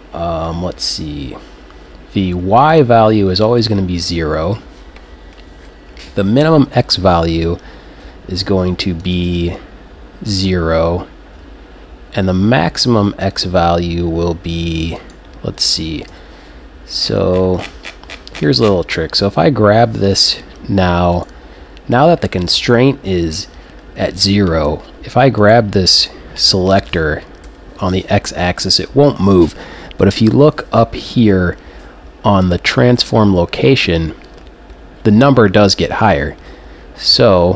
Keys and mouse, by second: 2.6-6.0 drag, 9.0-11.1 drag, 13.2-15.0 drag, 15.0-19.3 right drag, 16.1 n, 21.2-23.1 right drag, 25.4 right click, 26.7 g, 26.8 click, 31.3-33.1 drag.